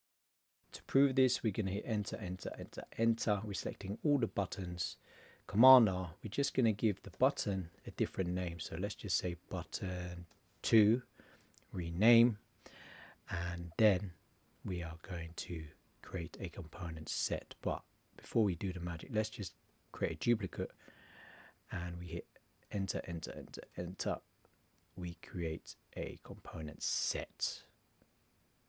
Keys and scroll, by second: 5.6 super+r, 7.1 shift+b, 19.6 super+d.